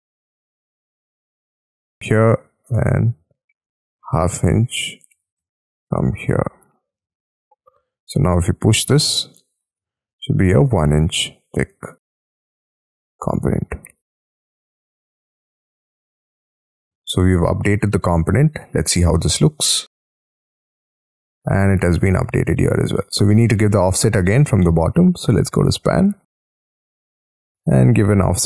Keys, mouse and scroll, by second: 0.4 shift+', 1.7 Return, 3.4-5.1 typing, 5.4 Return, 6.0 middle click, 6.9 space, 7.3 scroll up 2, 7.8 p, 9.3 middle click, 9.7 space, 10.3 p, 11.8 space, 14.1 space, 14.3 e, 14.9 space, 15.0 Escape, 15.6 middle click, 16.2-18.5 scroll down 42, 17.2 middle click, 18.5 Escape, 18.8-19.7 scroll up 18, 18.8 Escape, 19.7 middle click, 22.0 scroll down 6, 22.4-22.7 scroll up 6, 22.7 middle click, 23.9-24.5 scroll down 12, 24.5 scroll up 1, 24.6 middle click, 24.8 scroll down 1, 28.3-28.4 typing.